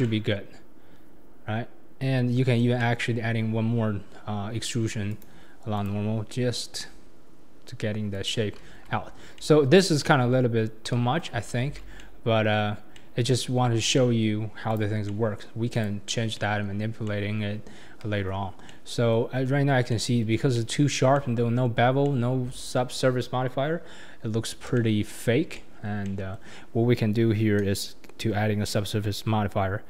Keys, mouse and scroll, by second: 0.0-1.2 middle drag, 5.1-8.1 right drag, 8.8 Tab, 8.9-9.3 scroll down 3, 9.3-10.9 middle drag, 10.9 KP_1, 11.2-11.5 scroll down 3, 11.6 alt+z, 12.0-12.6 middle drag, 12.6 scroll down 1, 12.8 scroll up 2, 12.9-14.7 middle drag, 14.7 click, 15.0-15.7 middle drag, 15.7 click, 16.3-18.0 middle drag, 18.0 KP_1, 18.6-24.6 middle drag, 24.6 scroll up 1, 24.7-29.1 middle drag.